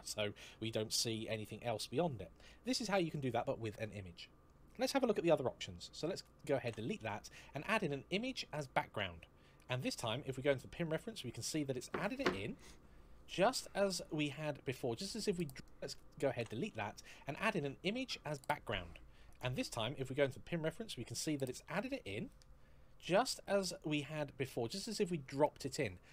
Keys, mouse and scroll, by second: 6.2 x, 6.4 Return, 6.8 shift+a, 8.4 click, 10.4 scroll down 1, 11.4 middle click, 15.9 x, 16.2 Return, 16.5 shift+a, 18.1 click, 18.1 click, 20.2-21.0 scroll down 1, 21.1 middle click, 25.3 middle click.